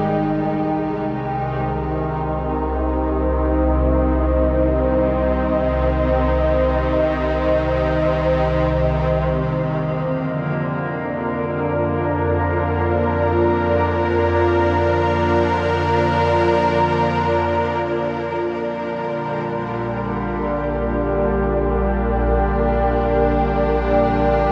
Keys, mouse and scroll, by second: 1.0 click, 2.2 Return, 3.7 click, 5.8-10.5 shift+drag, 11.9-15.2 typing, 12.1 click, 12.6 click, 12.9 click, 13.7 click, 14.1 click, 14.4 click, 14.8 click, 15.1 click, 15.4 click, 16.7-17.6 typing, 16.8 click, 17.7 click, 19.4-20.2 scroll down 1, 21.5-24.5 drag.